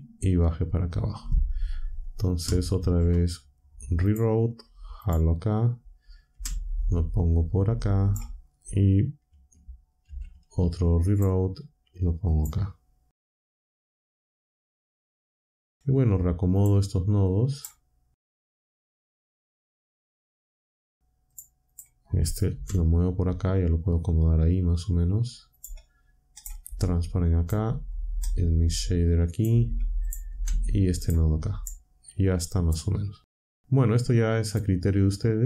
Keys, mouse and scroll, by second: 2.7 shift+a, 4.0 click, 5.0 click, 6.2 g, 8.0 click, 10.0 a, 11.1 click, 12.2 click, 13.4 g, 15.2 click, 15.7 click, 16.5 shift+click, 17.5 shift+click, 18.4 shift+click, 18.7 g, 19.1 click, 19.4 shift+click, 19.6 shift+click, 19.8 shift+click, 20.2 g, 21.3 click, 21.6 click, 22.5 g, 25.5 click, 26.3 click, 26.6 g, 27.3 click, 28.2-29.5 drag, 30.0 click, 30.2 g, 30.9 click, 31.6-32.8 drag, 33.5-34.7 drag.